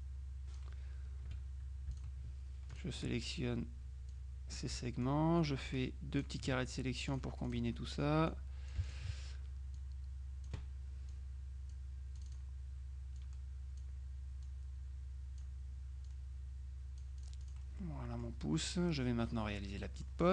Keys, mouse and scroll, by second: 0.1-1.2 drag, 1.4 F2, 2.0 shift+click, 2.8 click, 4.2 click, 7.2 click, 8.4 click, 9.8 click, 11.2-12.3 drag, 12.4 click, 13.3 click, 14.6-16.0 drag, 16.2-18.1 drag, 17.9 right click, 19.9 middle click.